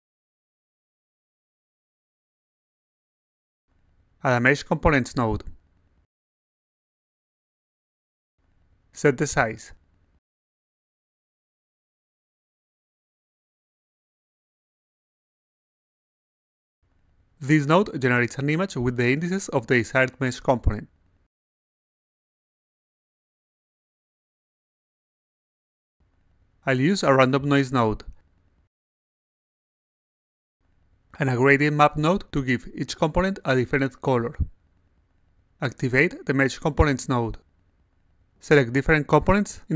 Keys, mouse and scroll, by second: 0.2 click, 0.4 click, 1.5-2.1 alt+drag, 2.9 click, 4.1 click, 6.4-8.2 drag, 8.9 click, 9.7-11.3 typing, 13.2 click, 14.5 click, 15.8 click, 16.7 click, 26.2 click, 28.7 click, 30.6 click, 32.7 click, 34.2 click, 35.9 click, 36.3 a, 38.1 click, 39.3 click.